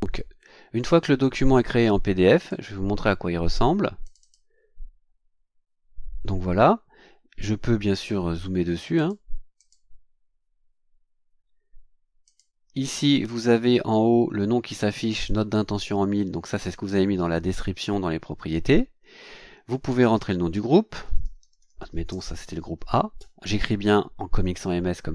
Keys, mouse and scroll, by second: 2.4 click, 4.0 click, 8.9 click, 9.6 click, 12.2 click, 20.8-22.6 typing.